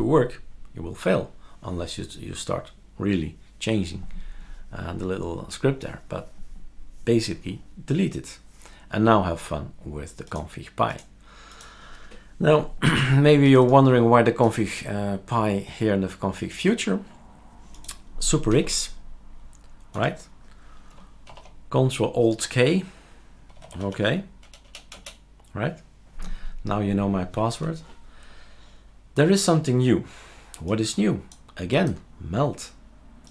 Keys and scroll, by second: 18.5 super+x, 19.9 Escape, 21.3 ctrl+alt+k, 23.3-24.5 typing.